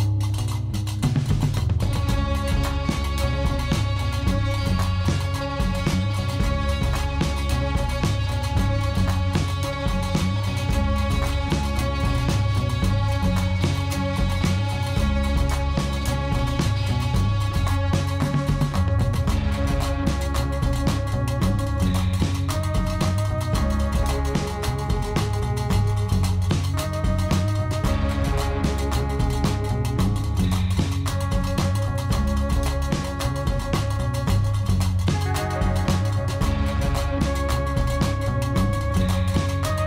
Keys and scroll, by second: 2.9 ., 3.0 5, 3.1 Return, 7.3 g, 7.5 r, 7.7 n, 7.7 d, 7.8 Return, 9.5-10.2 typing, 10.3 Return, 13.9 g, 14.0 z, 15.2 5, 15.3 Return, 16.5 n, 18.8 4, 19.0 Return, 19.5 0, 19.7 Tab, 20.2 4, 20.3 Return, 22.7 0, 22.7 Tab, 22.9 7, 23.1 5, 23.3 Return, 23.7 0, 23.8 Return, 32.9 3, 33.0 Return, 35.5-36.4 typing, 36.5 Return.